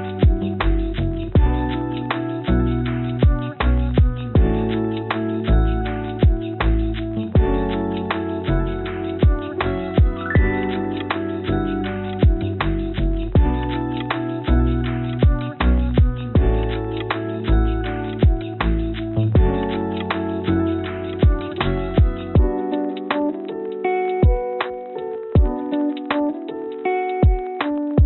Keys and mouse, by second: 4.5-5.6 drag, 6.1 click, 6.5 Tab, 8.8 middle click, 9.4 click, 9.6 middle click, 10.2 click, 11.4 click, 12.7 click, 13.8 click, 14.6 click, 15.9 click, 17.8 shift+click, 18.7-19.2 drag, 26.2 ctrl+p.